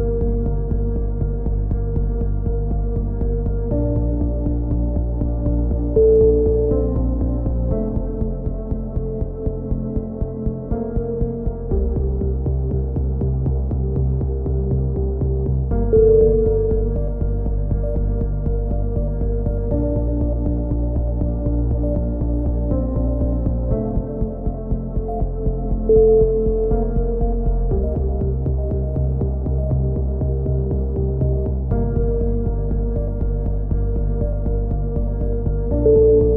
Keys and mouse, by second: 2.0 right click, 3.7-5.0 right drag, 4.2 click, 5.0 click, 7.2 right click, 7.7 click, 7.7 middle click, 8.2 click, 10.9 c, 11.6 right click, 12.5 click, 12.7 a, 13.1-14.2 middle drag, 14.2 right click, 14.4 click, 16.2 middle click, 16.7 click, 17.2 a, 17.5-20.2 middle drag, 23.9-24.9 middle drag, 25.1 right click, 25.3-26.7 middle drag, 27.4 click, 30.5 right click, 30.8 middle click, 31.5 click, 34.6 middle click, 35.4-36.3 right drag, 35.8 click.